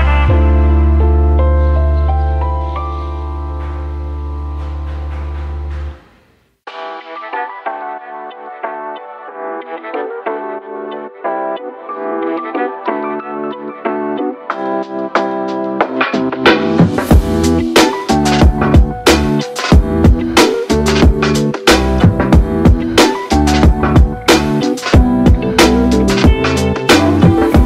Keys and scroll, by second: 1.0-4.7 typing, 4.8 Return, 7.9 ctrl+d, 9.4-9.9 typing, 15.9-20.6 typing, 22.9 ctrl+d, 24.6 ctrl+d, 25.8-26.7 j, 26.9 alt+j.